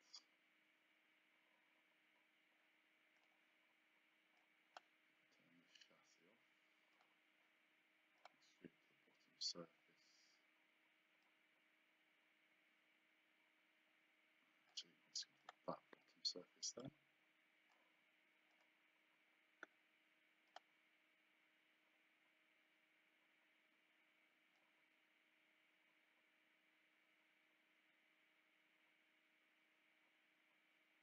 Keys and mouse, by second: 3.2 click, 4.4 click, 7.0 click, 8.2 click, 11.2 click, 15.4 click, 16.8 click, 18.5 click, 20.5 click, 24.6 click.